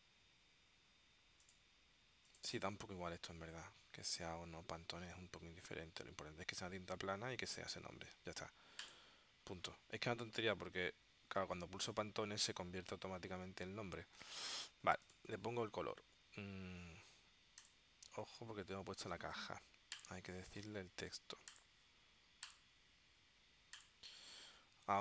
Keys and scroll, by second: 18.3 super+z.